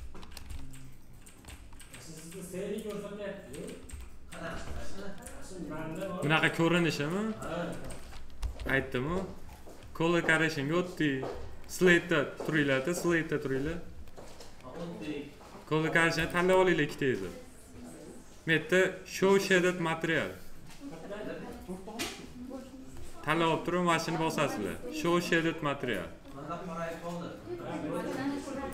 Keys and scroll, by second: 8.3 m.